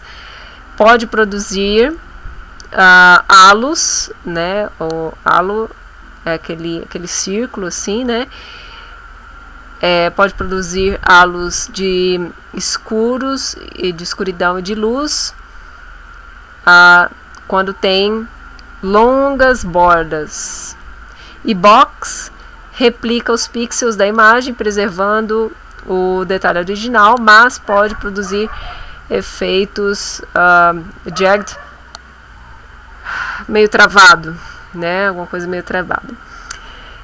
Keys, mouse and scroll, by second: 36.5 click.